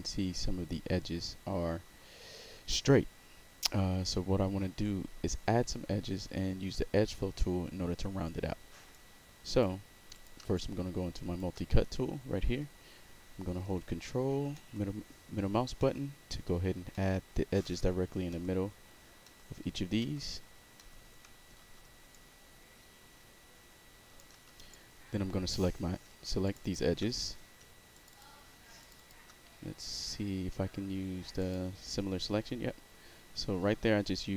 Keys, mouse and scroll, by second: 8.9-9.6 right drag, 10.1 click, 10.5-11.3 shift+right drag, 14.5 ctrl+middle click, 15.8 ctrl+middle click, 16.9 ctrl+middle click, 17.6 ctrl+middle click, 18.3 ctrl+middle click, 19.2 ctrl+middle click, 20.0 ctrl+middle click, 20.7 ctrl+middle click, 21.6 w, 22.1-24.1 shift+right drag, 24.4 w, 24.7-25.5 right drag, 26.4 shift+click, 26.6 shift+click, 27.9 shift+click, 28.1 shift+click, 28.8 shift+click, 28.9 shift+click, 31.4 click.